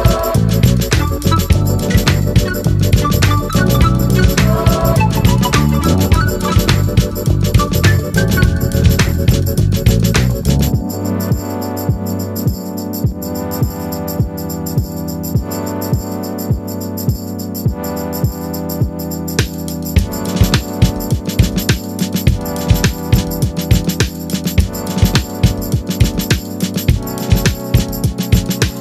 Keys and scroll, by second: 25.7 ctrl+z.